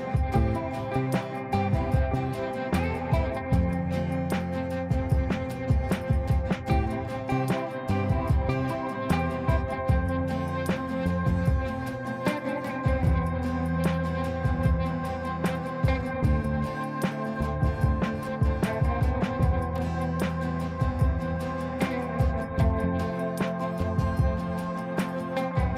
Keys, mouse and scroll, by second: 4.5-5.7 shift+drag, 6.1-7.1 typing, 7.6-8.2 click, 9.2-9.8 typing, 10.7 click, 13.4 right click, 14.4 click, 15.0 ctrl+a, 18.1 space, 21.6 ctrl+space, 23.2-24.1 drag.